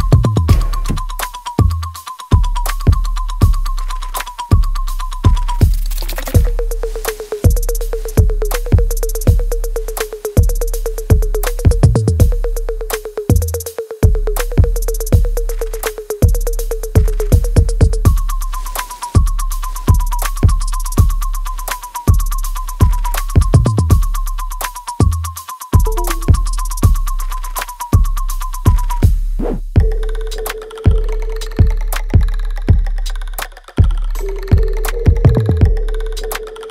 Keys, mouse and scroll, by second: 0.2 alt+middle click, 1.2 right click, 2.3 click, 4.5 ctrl+z, 5.1 shift+click, 6.4 ctrl+z, 7.0 shift+click, 13.7 alt+click, 15.9 click, 17.7-19.8 alt+drag, 19.8 click, 21.7 alt+middle click, 23.0 click, 23.0-24.8 drag, 24.8-30.2 ctrl+drag, 30.2 right click, 31.3 click, 31.5-33.4 alt+drag, 33.4 ctrl+s, 34.1 click, 34.1-36.0 alt+drag, 36.0 alt+middle click, 36.5 alt+click.